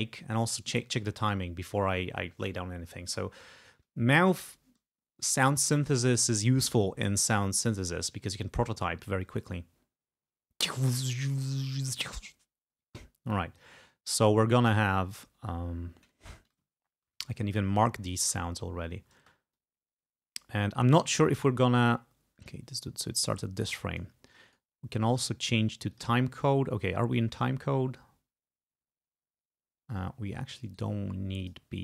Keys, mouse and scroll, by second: 1.0 click, 10.2 space, 12.9 space, 13.4 click, 16.7 ctrl+scroll up 2, 17.4 ctrl+click, 17.8 ctrl+scroll up 2, 18.3 ctrl+space, 19.3 space, 19.6-22.7 drag, 24.5 right click, 26.0 click, 30.7 right click, 31.5 click.